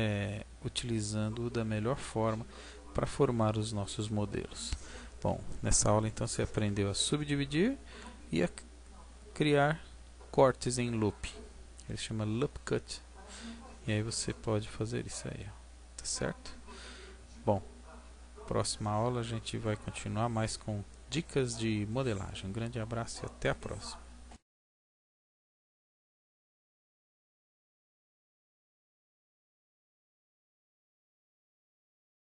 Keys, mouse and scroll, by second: 14.5-15.2 scroll down 1, 15.2 middle click.